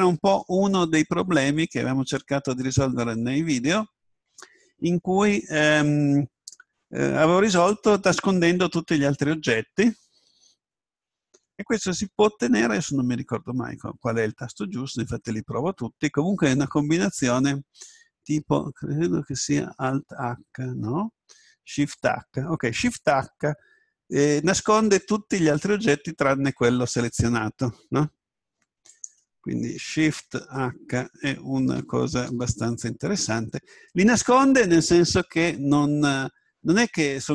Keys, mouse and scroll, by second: 20.2 alt+h, 21.7 shift+h.